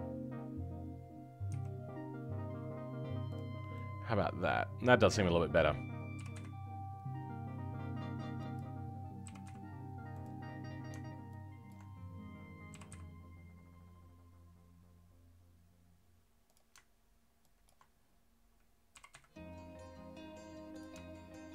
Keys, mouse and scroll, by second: 3.4 scroll down 3, 3.7-5.0 middle drag, 5.0-6.1 scroll up 2, 6.1 g, 10.4-11.6 scroll up 2, 11.6 ctrl+Left, 12.7 g, 18.9 g.